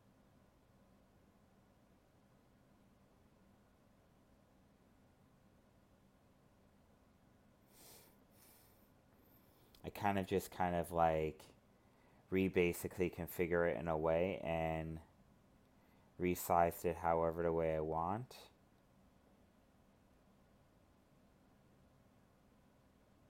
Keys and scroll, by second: 2.0 ctrl+z, 9.2 ctrl+z, 17.2 alt+space.